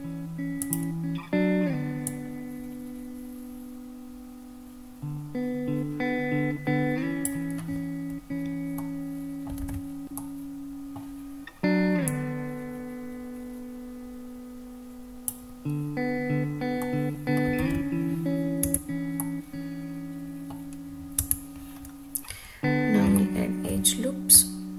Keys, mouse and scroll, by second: 0.8 click, 2.3-7.4 drag, 9.0-9.7 middle drag, 9.9 alt+z, 10.3-11.2 middle drag, 12.3 click, 16.4-16.8 scroll down 3, 16.9 middle click, 17.7 alt+z, 18.8 Tab, 19.3-20.6 middle drag, 21.3 Tab, 21.9-22.8 scroll down 1, 23.3 shift+middle click.